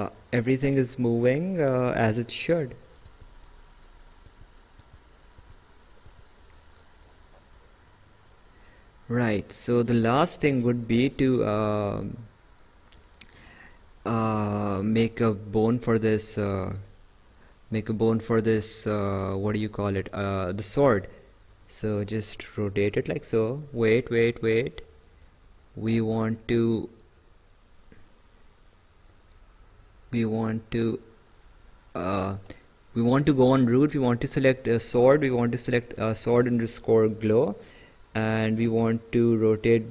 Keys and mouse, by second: 0.4 click, 3.1 ctrl+z, 4.3 ctrl+z, 8.1 right click, 14.1 click, 14.6 right click, 21.1 click, 25.3 ctrl+z, 26.2 click, 33.3 click, 35.7 ctrl+click, 39.3 click.